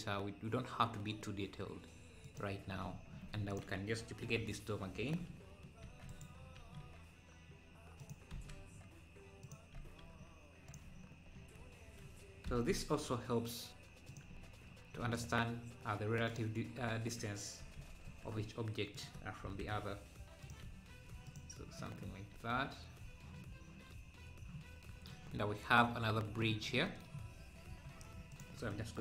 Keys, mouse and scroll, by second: 3.1 Tab, 3.1-3.5 scroll down 1, 3.5 click, 4.0 scroll down 1, 4.2 KP_7, 5.8 shift+d, 6.5 s, 11.3 scroll up 4, 12.4 g, 15.0 s, 17.8 g, 19.4 g, 21.3-22.3 drag, 23.9-24.5 scroll down 3, 25.5 scroll up 1, 27.6 scroll down 1, 27.8 KP_7, 28.3 KP_7.